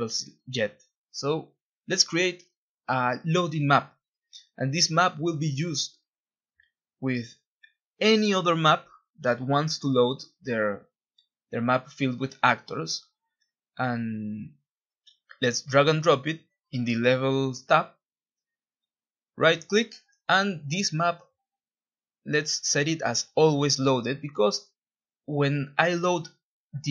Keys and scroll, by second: 0.8 ctrl+b, 2.1 ctrl+s, 4.0-5.8 typing, 6.7 Return, 8.3 Escape, 11.5 F1, 11.6 Escape, 24.5 Delete, 26.3-26.9 typing.